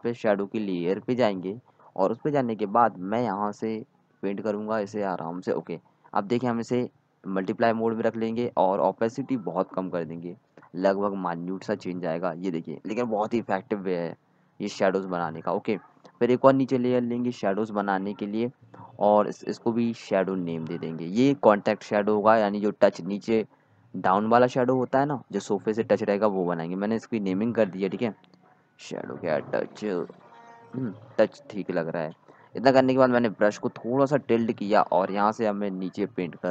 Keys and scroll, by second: 0.3 x, 1.2 ctrl+z, 7.2-7.7 typing, 15.7-16.3 typing, 22.5-26.2 typing, 28.1 Right, 28.3-31.7 typing.